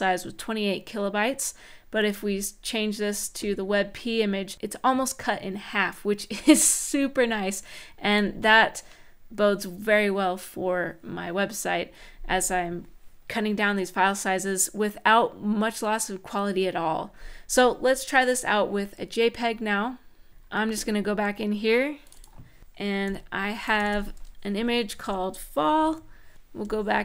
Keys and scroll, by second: 22.8-24.8 typing, 24.2 Right, 26.9 Up.